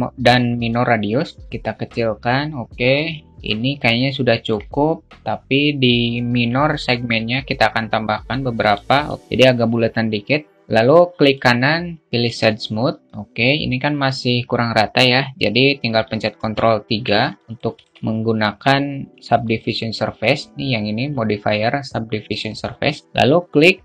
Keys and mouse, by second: 1.1-2.8 drag, 3.8-6.4 alt+middle drag, 6.4-8.1 drag, 8.7 alt+middle click, 15.9 ctrl+3, 16.9 alt+middle click, 17.5-18.2 alt+shift+middle drag.